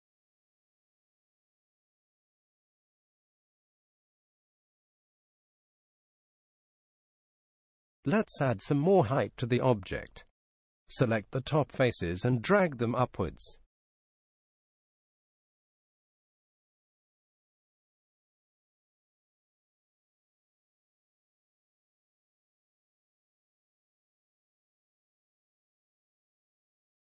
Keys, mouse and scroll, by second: 4.6-6.4 drag, 10.1-11.9 right drag, 12.5-14.3 right drag, 15.0-16.9 drag.